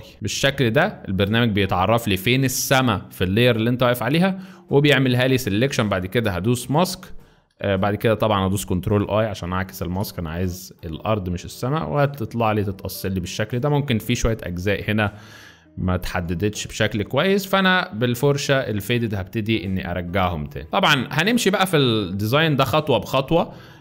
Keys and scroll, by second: 9.9 ctrl+i, 11.6 z, 14.2 x, 16.0-16.9 typing, 20.7 z, 23.4 z.